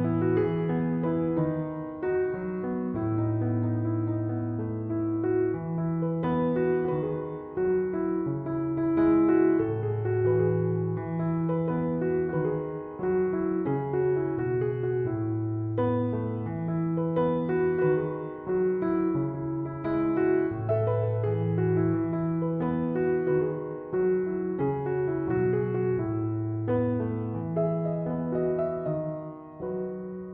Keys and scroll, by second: 6.7 f, 10.3 6, 10.6 Return, 15.6 Return.